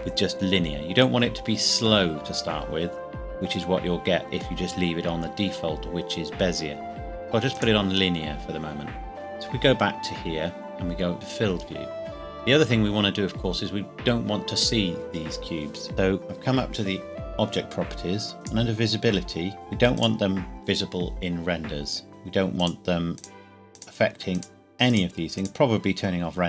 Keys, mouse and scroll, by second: 7.5 right click, 7.9 click, 12.4 scroll down 1, 15.9 click, 18.4 click, 18.9 scroll down 1, 19.9 click, 22.6 click.